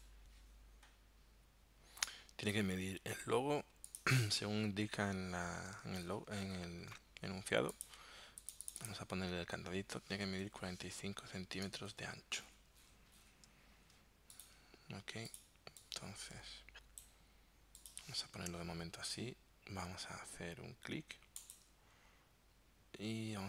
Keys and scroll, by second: 18.4 t.